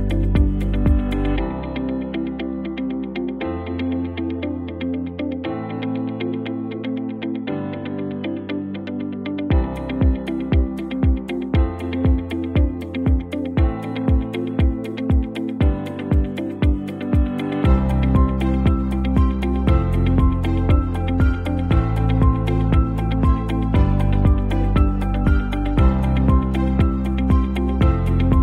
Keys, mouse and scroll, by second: 0.6 click, 1.9 click, 3.8 b, 4.7-5.7 alt+right drag, 7.1 click, 7.9 ctrl+t, 9.1-10.7 alt+shift+drag, 13.6 Up, 14.8 Left, 18.0-19.1 alt+drag, 19.4 ctrl+z, 20.5-21.8 shift+drag, 23.4 Down, 26.1 click.